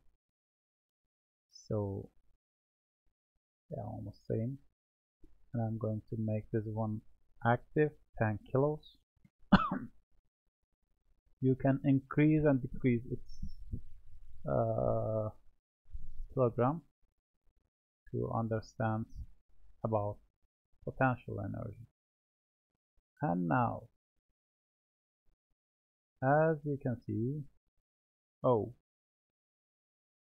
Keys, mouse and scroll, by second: 3.1-4.0 middle drag, 4.4-6.3 middle drag, 6.3-10.2 drag, 11.0 click, 12.3-17.8 drag, 17.8-18.5 middle drag, 18.5-18.9 scroll down 4, 18.9-21.9 middle drag, 22.2 click, 23.8-25.1 drag, 25.1-28.1 middle drag.